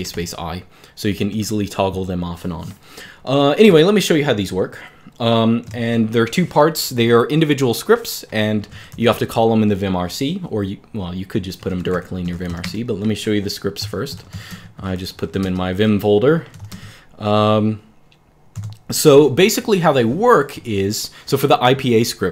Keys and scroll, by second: 1.1 Escape, 2.2 typing, 4.3 super+4, 5.4 super+Return, 8.2-9.3 typing, 11.3-16.8 typing, 18.2-19.0 typing.